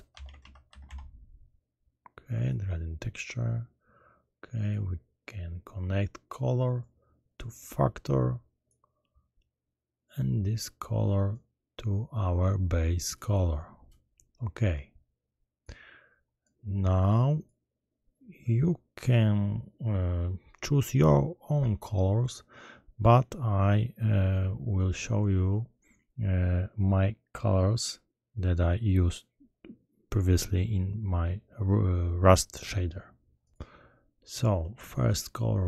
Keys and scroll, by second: 0.2-0.8 typing.